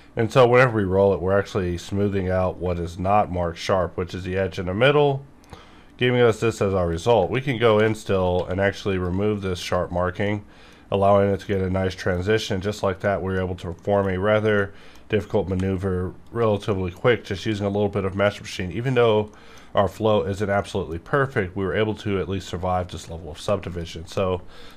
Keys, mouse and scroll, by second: 1.6 scroll down 1, 2.5 scroll down 1, 3.3 shift+scroll up 1, 3.8 scroll up 1, 4.6 scroll down 1, 4.9 scroll up 1, 5.3 scroll down 1, 5.6 scroll up 1, 6.0 scroll down 1, 6.3 scroll up 1, 6.8 click, 7.5 scroll up 1, 7.8 2, 8.0 alt+click, 8.3 q, 8.8 click, 9.8 scroll down 1, 10.2 middle click, 10.8-11.4 scroll up 1, 11.4-12.9 middle drag, 12.9 middle click, 13.7 middle click, 15.4 alt+v, 16.2 click, 16.6 middle click, 16.7 middle click, 17.3 alt+a, 18.2 middle click, 19.4 middle click, 19.7 scroll up 2, 20.6-22.5 middle drag, 22.5 middle click, 23.3 alt+v, 23.7 click, 24.1 middle click, 24.3 middle click.